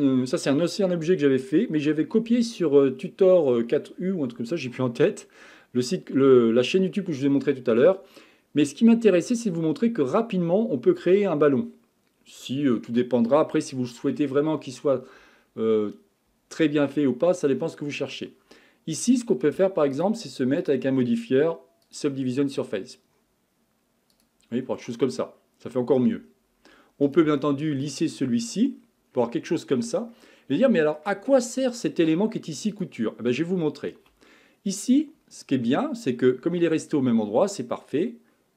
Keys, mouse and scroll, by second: 15.3-16.0 scroll up 4, 16.0-19.0 scroll down 1, 19.9 click, 20.6 click, 22.1-23.6 drag, 24.1-24.8 drag, 24.8-26.2 middle drag, 26.2-26.6 scroll down 1, 26.6-27.0 scroll up 3, 27.0-28.7 right drag, 28.7 scroll down 6, 29.1-29.8 scroll up 6, 29.8 scroll down 3, 30.1-32.7 middle drag, 32.7 click.